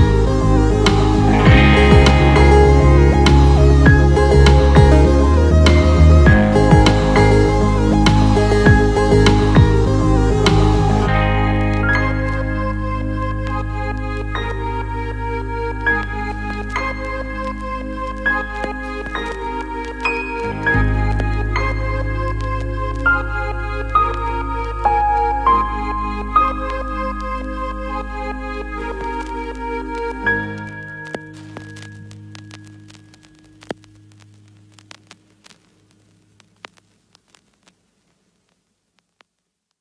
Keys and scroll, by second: 21.5 ctrl+t, 25.5 ctrl+l.